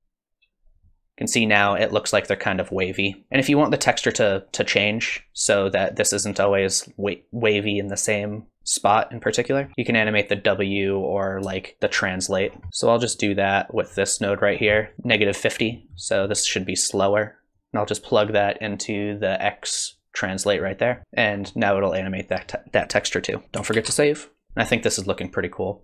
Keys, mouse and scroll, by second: 3.3 space, 9.7-11.3 scroll down 2, 11.3 middle click, 11.3 scroll up 4, 11.6 shift+click, 12.4 scroll down 1, 12.7 middle click, 12.7-13.1 scroll up 4, 13.1 click, 14.6-14.9 scroll up 4, 14.8 middle click, 14.9 middle click, 15.7 scroll down 3, 16.0 middle click, 16.6 scroll down 1, 17.5 click, 21.0 middle click, 21.0-21.7 scroll up 7, 21.0 space, 24.5 space.